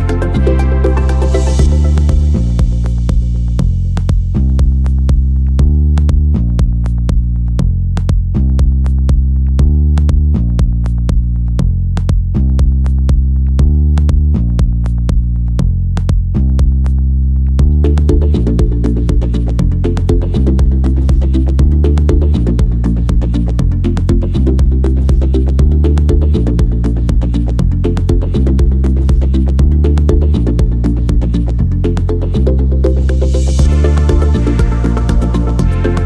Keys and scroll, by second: 6.7 2, 6.8 0, 8.5 2, 8.6 0, 8.9 Return, 13.5 5, 13.7 Return, 15.3 5, 15.3 0, 15.5 Return, 17.1 n, 18.4 m, 22.4 s, 25.5 ctrl+c, 27.0 m, 34.7 ctrl+c.